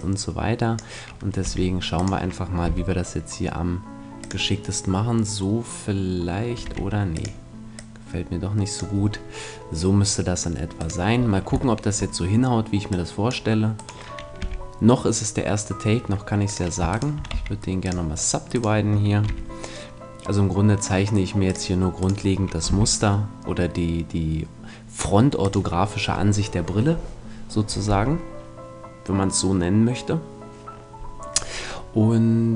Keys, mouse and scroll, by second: 1.4 r, 2.0-3.7 drag, 2.7 g, 4.3-6.1 drag, 6.6 r, 7.2-9.7 drag, 9.0 middle click, 10.7-12.5 right drag, 11.7-13.0 middle drag, 12.9-14.7 drag, 13.7-15.6 right drag, 14.4 g, 16.9 click, 16.9 right click, 17.3 w, 19.1-20.3 right drag, 19.3 g, 21.5-23.3 drag, 22.0-23.8 right drag, 22.7 g, 25.5-27.3 drag.